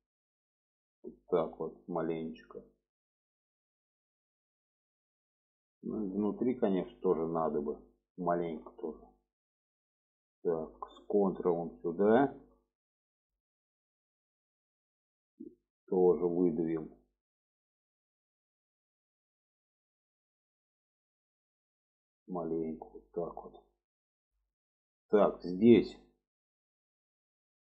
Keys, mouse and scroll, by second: 3.6 middle click, 4.5 shift+middle click, 5.0 middle click, 5.9 shift+middle drag, 7.6 click, 8.0-8.4 shift+middle drag, 9.3 middle click, 11.3 ctrl+click, 12.4 shift+middle click, 12.6 shift+scroll down 1, 12.8 middle click, 13.4-14.2 scroll down 1, 14.2-15.2 middle drag, 15.2-16.5 scroll down 1, 16.5-22.8 drag, 23.3 click, 24.0 shift+middle click, 24.9 middle click, 25.7 middle click, 26.4-27.6 middle drag.